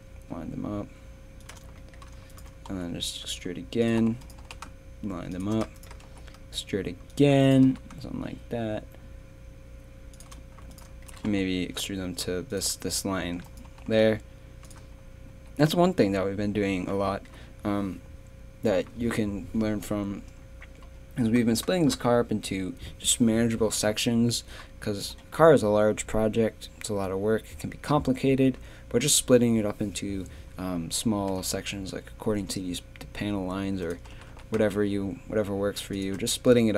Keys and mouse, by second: 2.7 e, 4.4 g, 6.0 e, 7.6 g, 10.7 click, 11.1 click, 11.3 e, 15.3 z, 16.3 a, 24.6 middle click, 31.3 z, 34.1 g, 36.3 z.